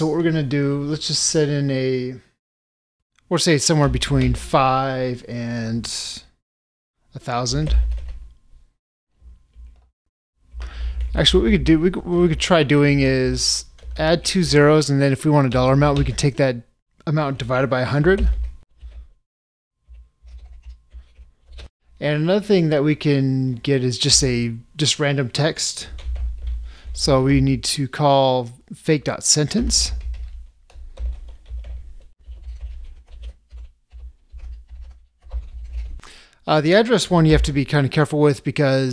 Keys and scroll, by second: 31.1 ctrl+space, 37.4 ctrl+space.